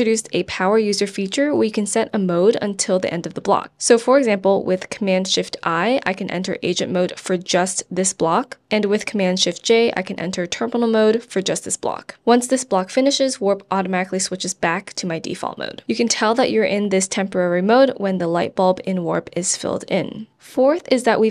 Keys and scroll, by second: 1.8 super+a, 2.2 BackSpace, 7.2 BackSpace, 11.3 shift+super+j, 17.9 shift+super+j.